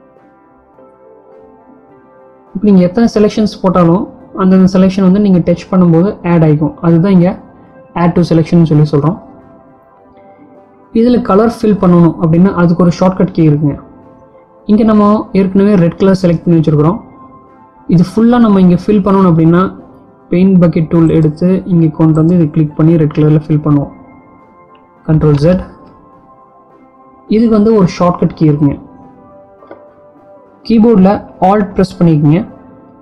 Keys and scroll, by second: 25.6 ctrl+z.